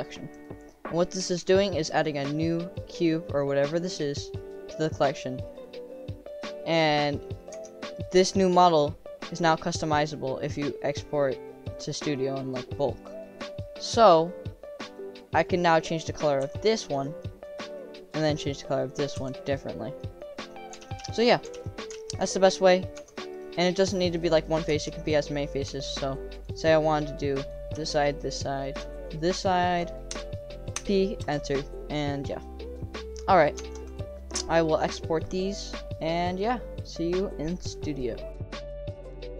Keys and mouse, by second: 5.4 middle click, 6.3 middle click, 7.2 middle click, 7.5 Tab, 7.9 click, 8.3 click, 11.7 click, 12.0 middle click, 12.6 click, 14.2-14.6 middle drag, 14.9 click, 15.4 click, 15.6 click, 16.0 middle click, 16.4 g, 17.2 middle drag, 18.2 click, 19.1 g, 20.1 middle click, 20.8 ctrl+z, 21.0 ctrl+z, 21.5 ctrl+z, 22.2 ctrl+z, 22.9 Tab, 23.4 click, 24.1 click, 24.7 Tab, 25.2 click, 25.7 Tab, 26.3 click, 26.6 middle click, 27.5 click, 28.2 shift+click, 28.4 middle click, 28.6 click, 29.5 middle click, 30.1 o, 30.7 p, 31.6 middle click, 32.6 click, 33.6 Tab, 34.6-35.2 drag, 36.0 click, 36.5-39.1 drag.